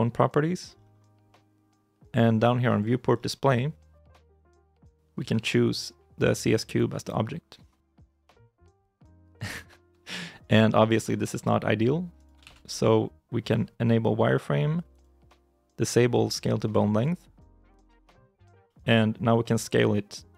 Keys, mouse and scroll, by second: 9.2 middle click, 9.5 shift+i, 9.6 shift+middle click, 10.4 scroll up 1, 10.6 middle click, 10.7 scroll down 1, 10.8 middle click, 11.2 r, 12.3 ctrl+z, 12.5 scroll up 1, 13.3-15.4 scroll down 1, 17.7 scroll up 1, 18.1 middle click, 18.6 shift+middle click.